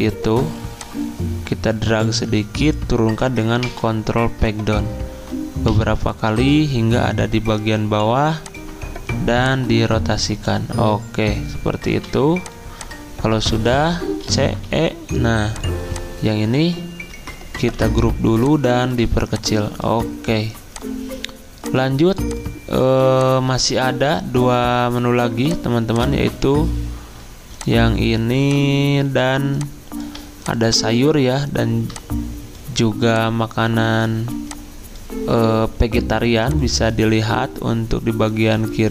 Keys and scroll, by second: 3.6 ctrl+Page_Down, 5.7 ctrl+Page_Down, 11.9 v, 14.2-14.6 typing, 17.3-18.1 typing, 34.2 z.